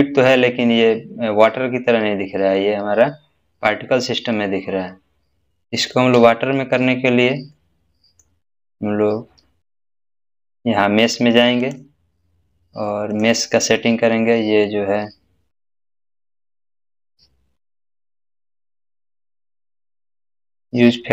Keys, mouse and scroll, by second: 7.5-8.5 middle drag, 9.1-9.8 scroll down 1, 11.6 click, 13.9-15.7 scroll down 1, 19.2 scroll down 1, 19.3-21.1 scroll up 1.